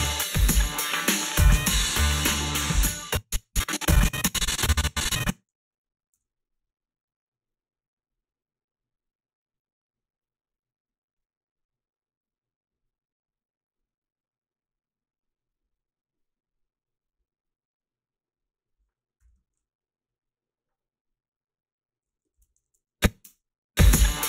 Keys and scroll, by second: 2.9 space, 6.2 f, 19.3 a, 22.4 ctrl+r, 22.6 a, 23.2 space.